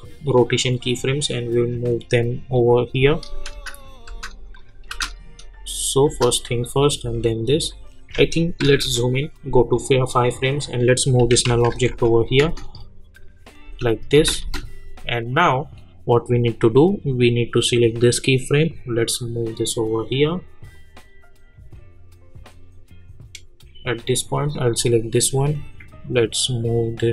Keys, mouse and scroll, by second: 3.5 space, 4.5 click, 4.9 space, 7.0 click, 8.6 =, 9.7 click, 11.2-12.4 typing, 15.2-27.1 drag.